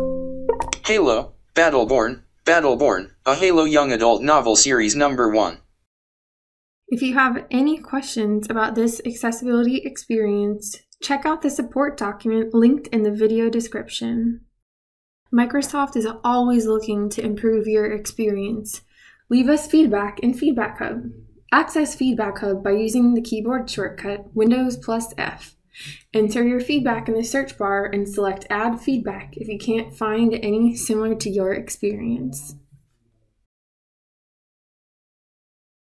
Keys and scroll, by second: 22.8 super+f.